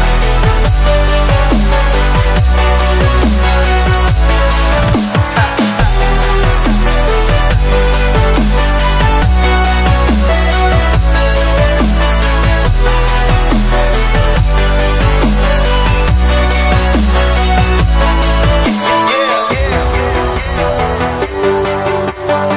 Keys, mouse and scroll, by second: 0.9 shift+click, 1.8 s, 2.5 click, 3.5 click, 3.9 scroll up 2, 4.1-5.8 shift+middle drag, 5.8-6.5 scroll down 5, 6.5 middle drag, 6.7-7.4 scroll up 5, 6.9 shift+middle drag, 7.4 middle drag, 7.7 scroll down 1, 7.9 shift+middle drag, 8.1 scroll up 1, 8.3 click, 9.4 Tab, 9.9 a, 10.5 ctrl+b, 11.7 Tab, 11.9 click, 12.0 Tab, 12.8 a, 13.2 ctrl+b, 14.8 Tab, 15.1 click, 15.6 Tab, 16.0 ctrl+b, 17.0 a, 17.5 ctrl+b, 18.7 Tab, 18.9-19.3 scroll down 5, 19.3-19.6 middle drag, 19.6 click, 19.9 click, 21.0 click, 21.8-22.2 scroll up 6, 22.2 middle click.